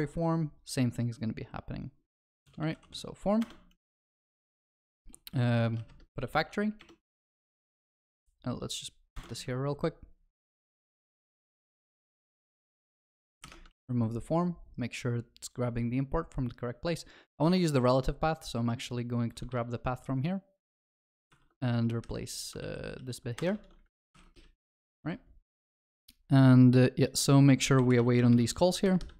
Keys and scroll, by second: 3.5 Return, 9.3 ctrl+v, 13.4 ctrl+y, 19.5 ctrl+c, 22.6 ctrl+z, 23.5 ctrl+v, 24.1 ctrl+y, 25.0 ctrl+y.